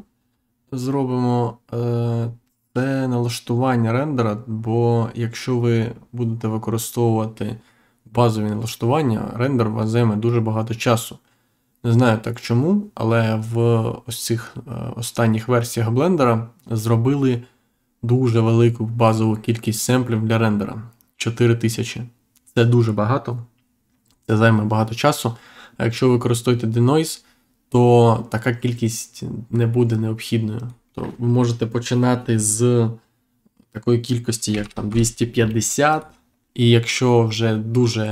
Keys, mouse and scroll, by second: 30.5 click, 34.5 5, 34.8 0, 35.8 click.